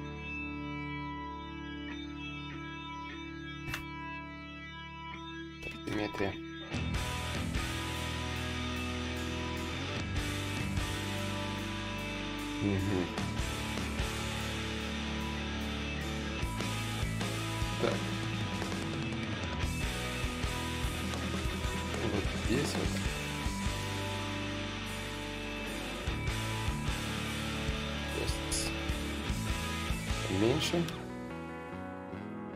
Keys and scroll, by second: 1.0 shift+d, 2.4 shift+d, 4.4 x, 10.8 d, 12.0 d, 16.1 d, 24.3 d, 26.8 ctrl+z, 28.0 space, 30.6 s.